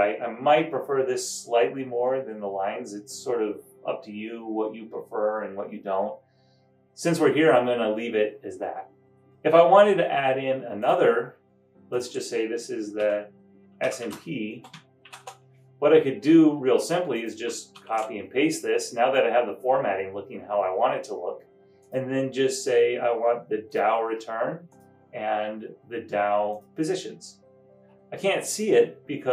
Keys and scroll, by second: 13.2-15.6 typing, 17.5-18.3 typing.